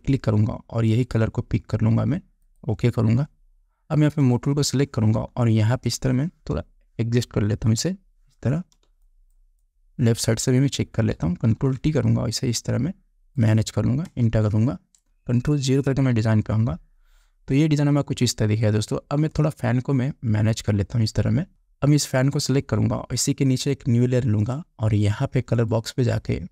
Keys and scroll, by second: 8.0 Right, 9.3 space, 12.0 ctrl+t, 14.5 Return, 16.3 ctrl+0, 21.5 Down.